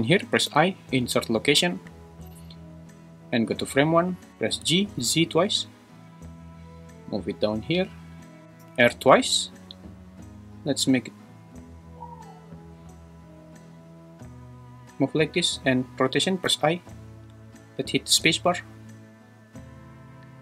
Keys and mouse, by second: 0.5 i, 3.3 shift+Left, 4.5 g, 5.0 z, 5.2 z, 8.6 r, 8.8 r, 16.5 i, 18.1 space.